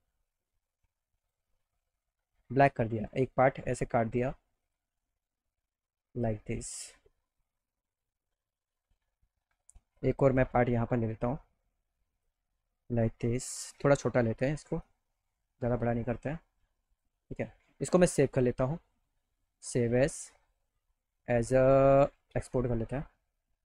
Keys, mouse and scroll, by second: 1.2 click, 3.1 click, 5.0 click, 5.7 middle click, 10.0-12.2 alt+drag, 13.5 ctrl+t, 14.8-15.9 drag, 16.9 click, 18.3 click, 22.3 click.